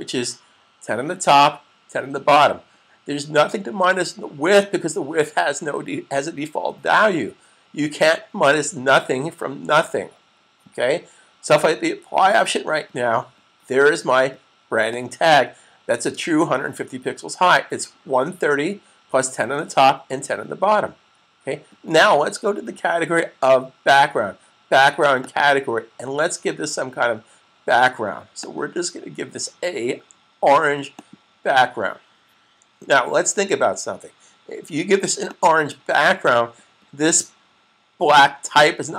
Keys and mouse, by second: 0.2-0.9 typing, 12.2 click, 25.0 click, 28.3 click, 35.2 click.